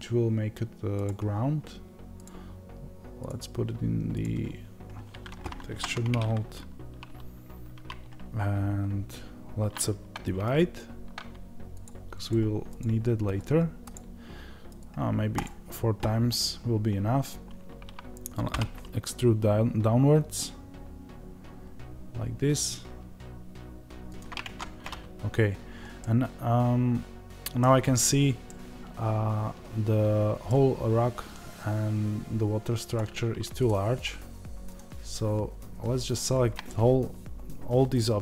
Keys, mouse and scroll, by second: 24.3 Tab, 25.9-32.8 middle drag, 27.9-28.4 scroll up 1, 32.8 click, 36.6-38.2 middle drag.